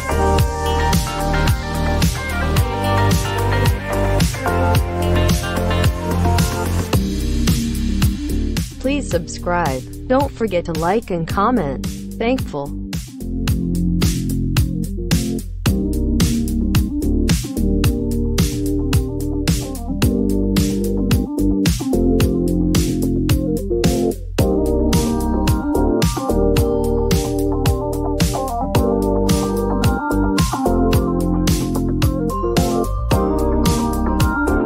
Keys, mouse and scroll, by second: 0.4 click, 6.6 click.